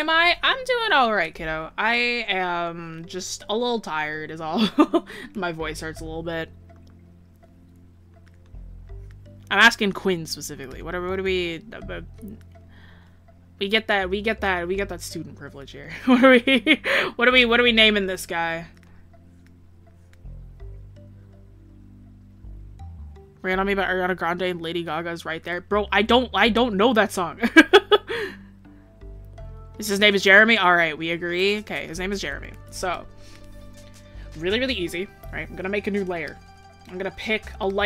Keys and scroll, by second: 11.8 ctrl+z, 16.9 ctrl+z.